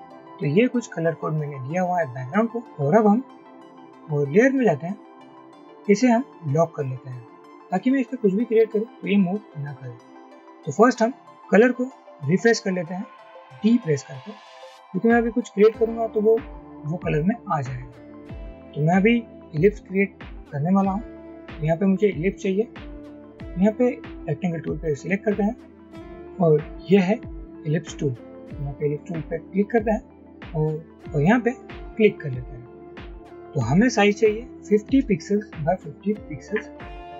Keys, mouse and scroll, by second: 0.0-0.4 typing, 13.7 typing, 34.7-37.1 typing, 35.3 Tab.